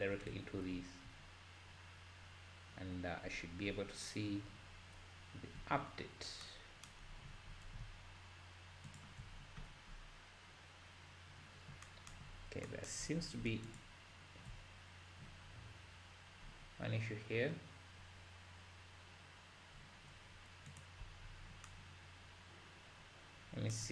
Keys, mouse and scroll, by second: 0.0 ctrl+space, 0.7 `, 1.8-2.7 scroll down 3, 3.7 n, 5.6-5.9 scroll up 3, 8.9 ctrl+shift+click, 9.3-10.1 scroll up 10, 11.1 scroll up 1, 13.8 ctrl+shift+click, 15.4-16.4 scroll down 3, 16.4-17.6 scroll up 4, 17.9-18.7 scroll down 1, 18.7-19.2 scroll down 2.